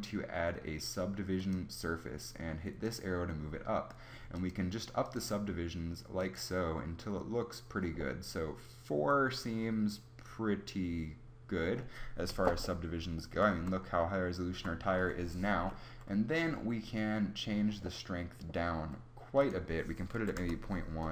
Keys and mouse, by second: 8.0-9.7 middle drag, 12.2 z, 14.4 z, 18.0 middle click, 19.3-21.1 drag.